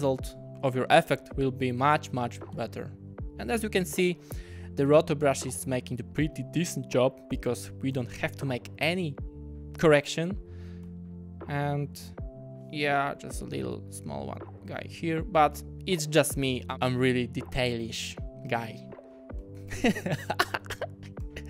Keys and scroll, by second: 1.1 w, 2.5 w, 3.6 w, 6.2 w, 8.0 w, 10.8 w, 13.0 ..